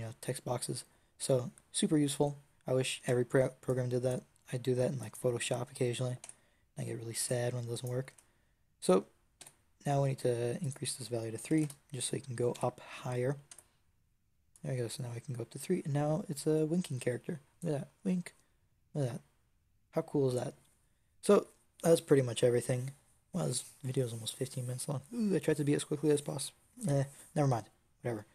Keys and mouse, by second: 3.5-4.9 drag, 6.1 Tab, 7.1 Tab, 8.0 Tab, 9.3 n, 12.4 n, 13.4 Tab, 18.9-28.3 middle drag.